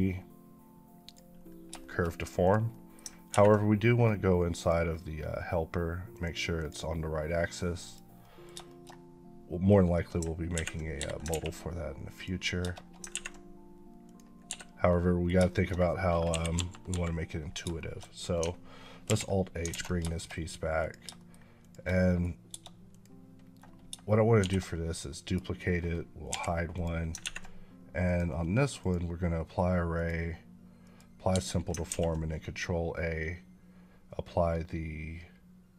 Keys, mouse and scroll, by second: 0.9 click, 1.6 shift+middle click, 2.3 click, 2.6 middle click, 4.4 click, 8.1 middle click, 8.5 shift+middle click, 10.8 Escape, 12.0 click, 13.9 click, 14.3 Escape, 14.7 middle click, 15.3 shift+middle click, 16.1 KP_1, 17.6 shift+middle click, 18.9 alt+h, 19.6 alt+a, 19.9 shift+middle click, 20.6 click, 21.0 shift+middle click, 21.5 shift+click, 21.8 middle click, 22.7 click, 24.2 shift+d, 25.1 right click, 26.1 h, 26.6 click, 27.9 click, 31.2 Escape, 31.7 ctrl+a.